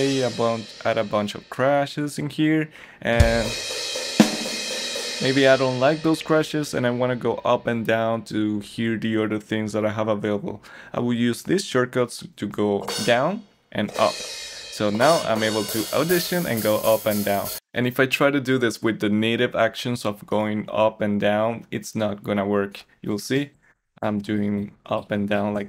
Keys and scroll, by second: 18.4 Up, 23.3 Up, 23.7 Down, 24.0 Up, 24.3 Down, 24.5 Up, 24.7 Down, 24.9 Up, 25.1 Down, 25.3 Up, 25.5 Down.